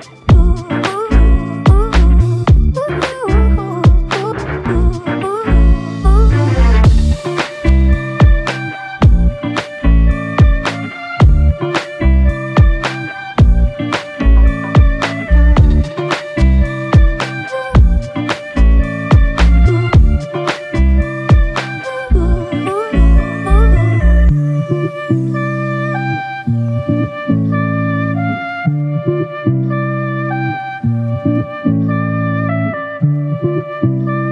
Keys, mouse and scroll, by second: 0.3 double click, 0.9 alt+click, 3.0 alt+shift+click, 4.1 alt+click, 4.7 ctrl+alt+click, 9.5 r, 20.6 f, 21.5 double click, 24.5 ctrl+click, 27.9 shift+click, 31.4 double click, 33.5 shift+click.